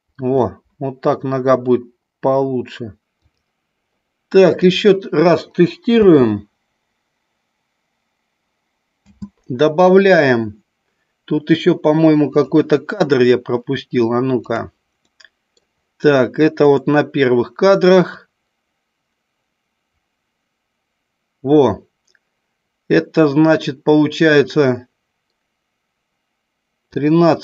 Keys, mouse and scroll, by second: 0.4 scroll up 1, 0.5-3.0 middle drag, 4.6 click, 5.8 space, 8.9 space, 12.3 click, 14.3 click, 15.1 middle click, 16.6 click, 18.1-26.8 drag.